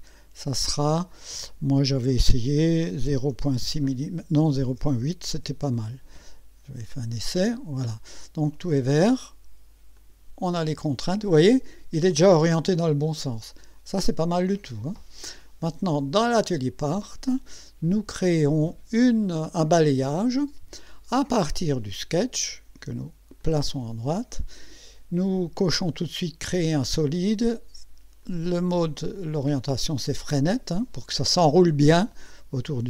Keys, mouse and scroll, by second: 0.1 click, 3.1 KP_0, 3.3 KP_Decimal, 3.7 KP_6, 4.8 BackSpace, 5.4 KP_8, 7.2 click, 10.0 click, 15.7 click, 16.6 click, 19.9 click, 21.9 click, 23.4 click, 26.4 click, 28.2 click.